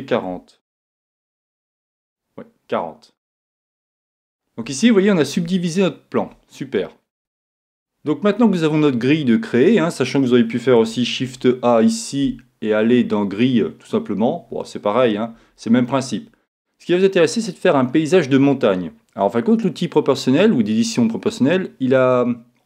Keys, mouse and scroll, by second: 1.2 click, 4.1-7.2 middle drag, 7.2 a, 11.2 shift+a, 15.3 Escape.